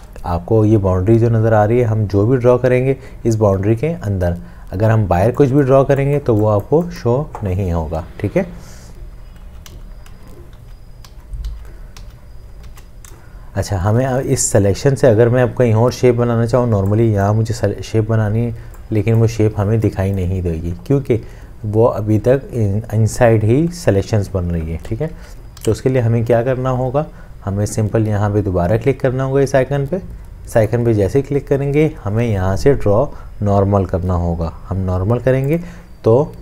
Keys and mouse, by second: 9.1 ctrl+z, 12.9 ctrl+shift+z, 24.9 ctrl+z.